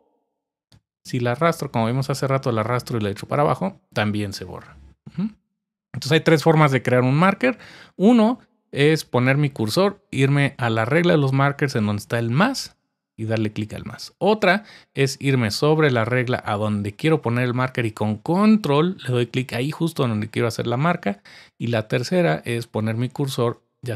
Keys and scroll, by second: 0.2 super+z.